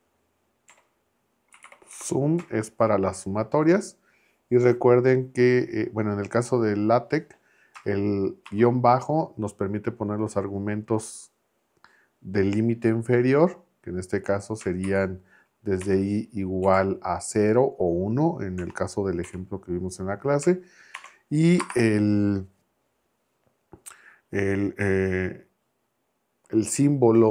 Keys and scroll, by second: 0.7-2.4 typing, 8.4 shift+-, 14.8 shift+[, 15.8 l, 16.6 =, 18.6 1, 19.2 Right, 20.9 shift+6, 21.6 space.